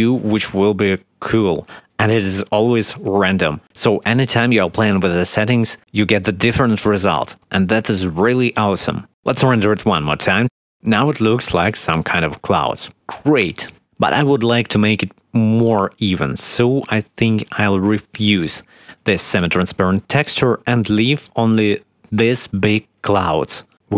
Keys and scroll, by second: 0.0-2.0 typing, 3.3 shift+a, 3.9 shift+s, 4.9 shift+e, 5.2 shift+s, 8.7 F12, 14.7 Escape.